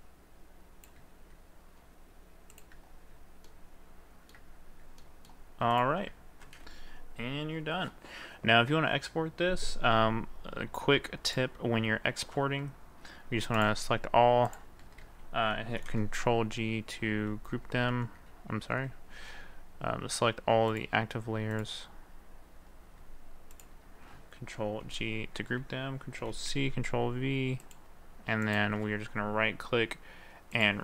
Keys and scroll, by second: 15.8 ctrl+g, 17.9 ctrl+z, 19.2 ctrl+a, 24.9 ctrl+g, 26.3 ctrl+c.